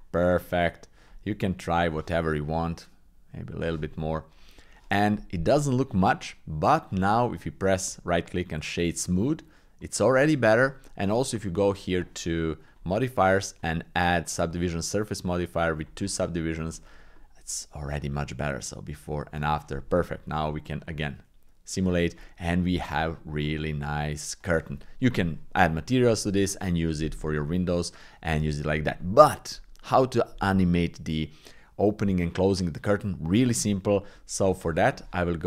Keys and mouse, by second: 1.1 click, 1.9 click, 2.9 click, 6.9 click, 7.8 w, 9.8 click, 11.4 click, 12.7-14.5 drag, 16.7 shift+click, 17.2 click, 18.6-21.0 drag, 22.3 click, 22.8 click, 24.7 middle click.